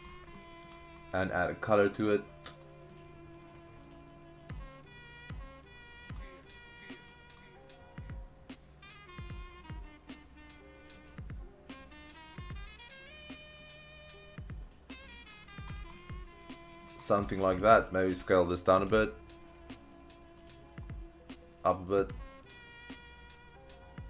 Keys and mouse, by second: 0.4-0.7 middle drag, 2.9 click, 7.0 click, 15.1 click, 15.7 click, 15.9-16.8 middle drag, 17.2 click, 17.8 shift+click, 18.9 s, 20.4 click, 22.1-24.0 drag.